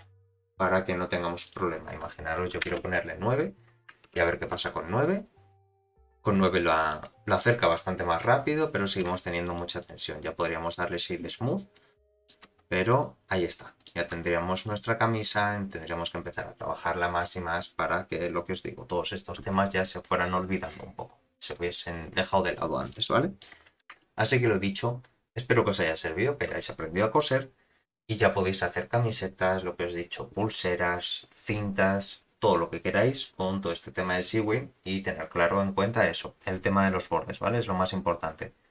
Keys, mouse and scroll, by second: 1.1 scroll down 1, 1.4-3.3 drag, 4.1 shift+Left, 4.5 space, 6.1-7.3 middle drag, 7.3 scroll down 2, 9.1 scroll down 1, 9.1 space, 9.4 right click, 10.3-12.4 middle drag, 12.4 space, 13.1-14.4 middle drag, 14.2 space, 14.6-15.9 middle drag, 17.1-17.9 scroll up 8, 17.9-19.2 scroll down 4, 22.9-23.4 middle drag, 24.0 shift+middle drag.